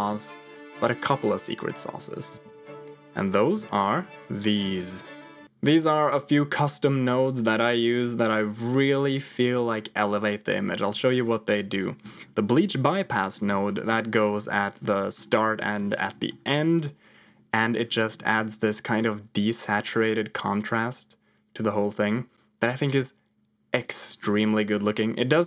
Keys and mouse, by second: 2.5 ctrl+v, 3.5 g, 4.5 middle click, 4.9 click, 5.3 g, 11.7 click, 12.5 middle click, 13.6 middle click, 14.1 g, 15.2 middle click, 16.1 middle click, 16.4 g, 18.1 middle click, 18.9-23.7 drag, 25.0 middle click.